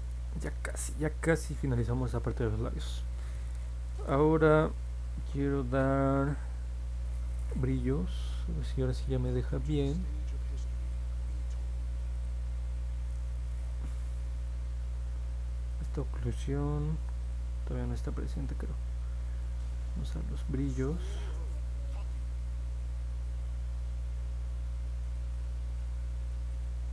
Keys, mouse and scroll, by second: 0.3 click, 0.6 click, 1.0 click, 1.4 click, 8.8 click, 12.1 click, 15.6 click, 17.2 click, 19.5-21.4 drag, 25.0 click, 26.5 click.